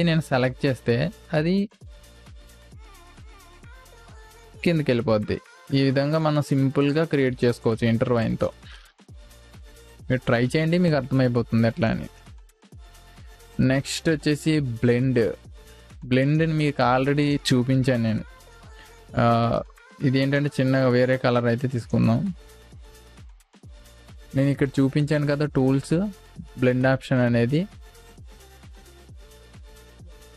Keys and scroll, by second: 5.5 ctrl+z, 6.5 space, 9.2 Delete.